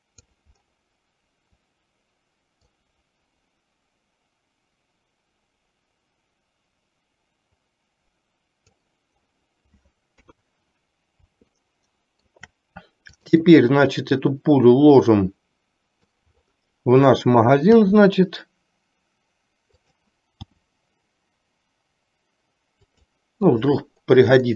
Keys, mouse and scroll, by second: 2.8 click, 3.1-9.0 drag, 10.3 KP_3, 11.8-12.4 shift+middle drag, 14.3-16.4 drag, 17.8 r, 20.6 g.